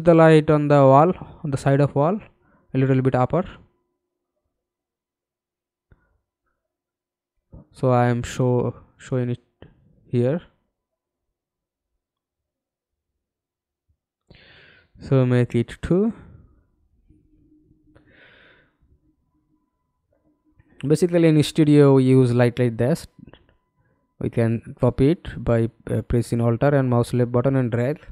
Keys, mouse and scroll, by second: 1.1 alt+click, 4.1 alt+click, 4.1-4.6 scroll down 1, 4.6 alt+click, 6.1 alt+click, 9.2 alt+click, 10.8-12.6 scroll down 1, 12.6 2, 13.1 Return, 16.3 alt+click, 19.2 alt+click, 22.7 alt+click, 24.0-24.5 scroll down 2, 24.6-25.0 alt+scroll up 1, 25.0 alt+click, 27.2 alt+click.